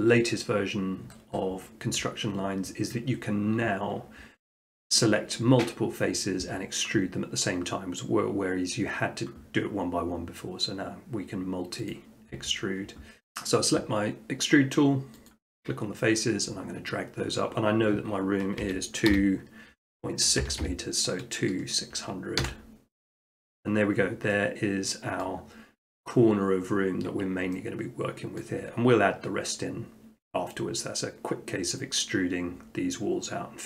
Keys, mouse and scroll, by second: 11.9 click, 15.3 click, 18.6-19.1 typing, 20.4 0, 20.6 0, 22.4 Return, 25.2-26.3 middle drag, 27.4 middle click.